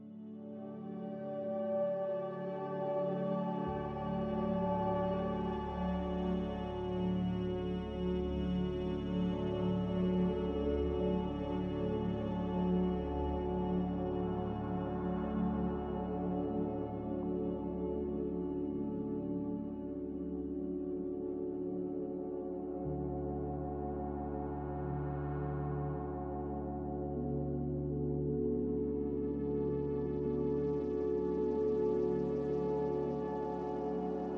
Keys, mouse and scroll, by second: 11.7-12.5 typing, 15.9 2, 32.1-32.9 typing.